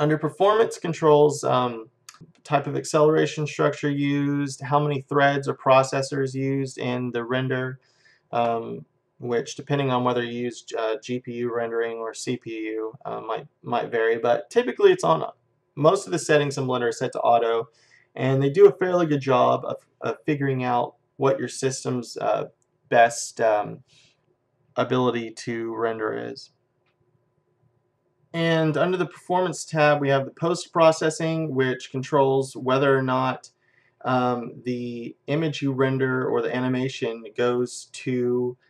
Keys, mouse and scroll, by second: 2.1 click, 30.1-31.9 drag.